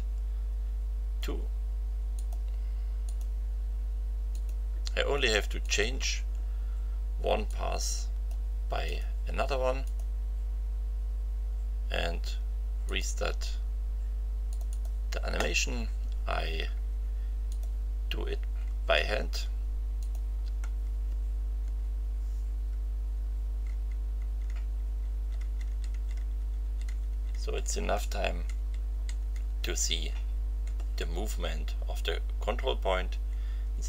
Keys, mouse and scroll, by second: 2.1 click, 3.0 click, 4.3 click, 5.6 click, 7.5-8.5 drag, 8.8 click, 9.8 click, 12.8 click, 14.5 click, 17.5 click, 20.0 click, 21.6 Left, 23.1 Right, 28.5 Right, 33.4 Right.